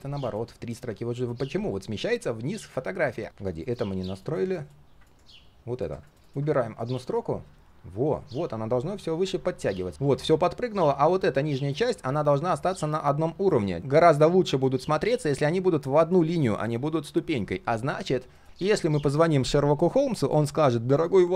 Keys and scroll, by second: 9.9 ctrl+z.